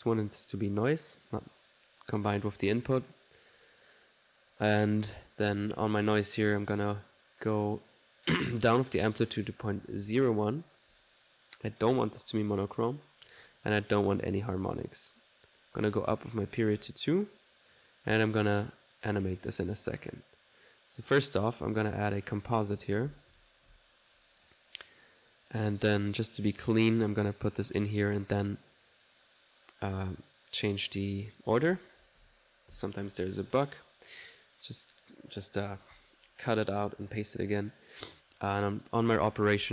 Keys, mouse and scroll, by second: 0.1 click, 0.6 click, 1.5 click, 5.8 click, 9.0 click, 12.0 click, 12.7 click, 13.4 click, 14.0-15.3 drag, 16.2-16.9 typing, 16.6 click, 17.6 click, 18.5 click, 19.6 click, 19.9-20.6 typing, 20.1 click, 22.0 right click, 22.2-23.7 typing, 22.3 click, 24.3 click, 24.8 click, 25.2 click, 25.9-29.0 drag, 31.7 click, 32.0-33.7 typing, 33.7-37.7 ctrl+drag, 39.2 1.